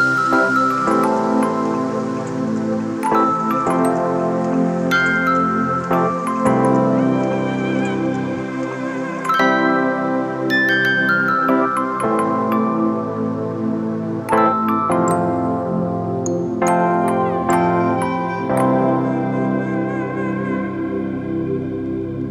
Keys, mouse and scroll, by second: 6.7 ctrl+d, 14.7 alt+shift+click, 18.0 alt+shift+click.